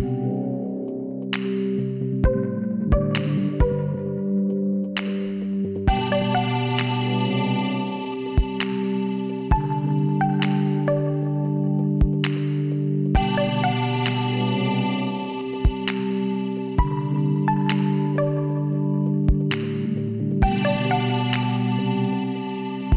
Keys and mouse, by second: 1.9-3.5 drag, 4.3 z, 4.4 click, 4.8 middle click, 9.9 click, 10.8 x, 11.5 click, 12.5-14.9 drag, 13.8 x, 14.9-16.5 middle drag, 17.2-18.4 middle drag, 18.4 a, 20.2 w, 22.7 a.